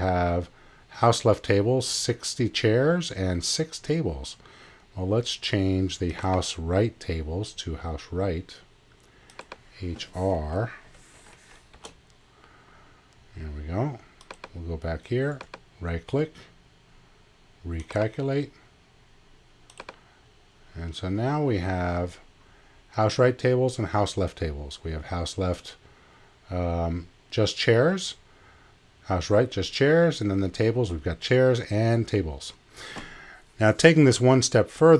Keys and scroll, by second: 10.8 BackSpace, 11.7 shift+r.